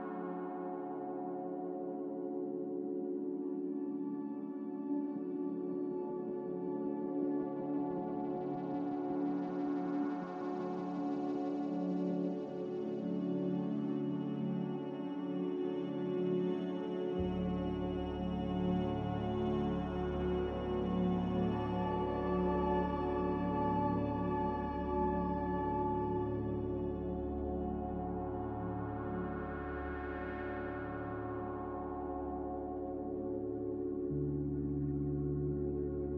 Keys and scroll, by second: 3.4 Escape, 11.8 ctrl+z, 15.6 ctrl+z, 26.4 Delete.